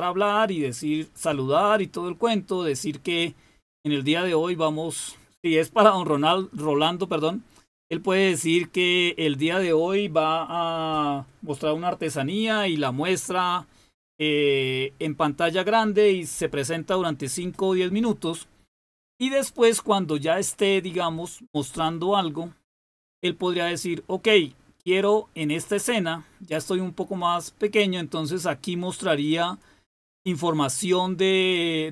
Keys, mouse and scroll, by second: 25.5 click.